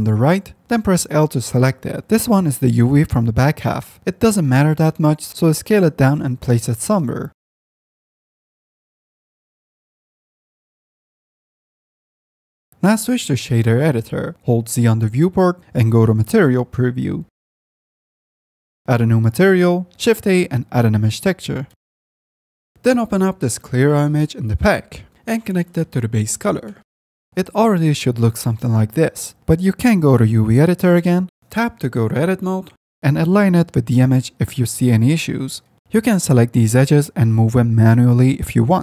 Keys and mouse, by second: 1.7 l, 3.4-10.5 typing, 11.7 s, 12.7 Tab, 13.2-14.0 drag, 16.1 z, 18.7 F10, 20.7 shift+a, 23.3 click, 25.4-26.6 drag, 27.3 F10, 28.9-30.3 drag, 31.4 Tab, 32.2 click, 33.5 l, 34.7 s, 35.7 Tab, 35.8 2, 37.1 s, 38.2 ctrl+z, 38.4 click, 38.7-38.8 middle drag.